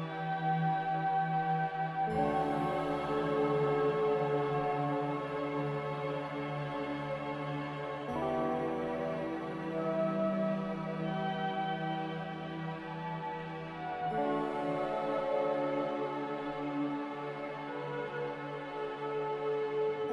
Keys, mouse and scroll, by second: 0.1 a, 0.4 a, 2.2 ctrl+c, 2.8 ctrl+r, 16.7 n.